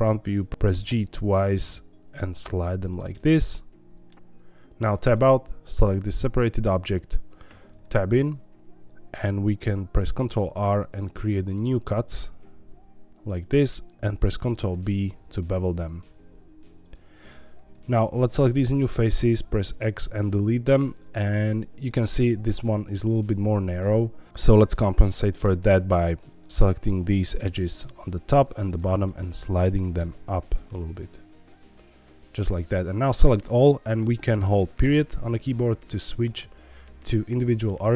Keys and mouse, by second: 0.5 ctrl+z, 0.5 g, 0.7 g, 0.9 g, 2.8 shift+click, 3.1-4.1 middle drag, 4.8 Tab, 5.1 click, 7.4 Tab, 10.0 ctrl+r, 14.5 ctrl+b, 16.8 click, 18.3 3, 19.3 x, 21.8 middle click, 24.3 2, 25.2 middle click, 26.3 click, 27.3 g, 27.5 g, 28.6 shift+click, 29.1 click, 29.9 g, 32.1 shift+click, 33.1 a, 34.8 ..